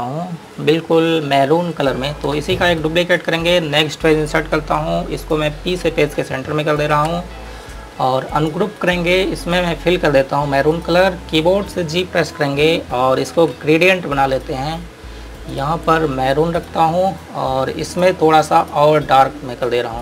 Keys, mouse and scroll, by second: 3.1 click, 5.0 Page_Down, 5.5 click, 7.2 p, 8.7 click, 11.9-12.4 scroll up 1, 13.6 g, 14.6 click.